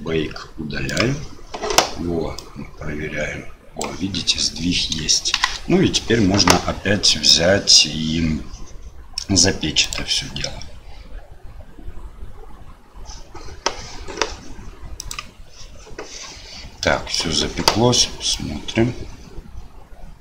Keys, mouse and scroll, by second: 2.4-3.8 drag, 5.3 shift+Left, 9.9-16.2 drag, 16.8 middle click, 18.3-20.2 drag.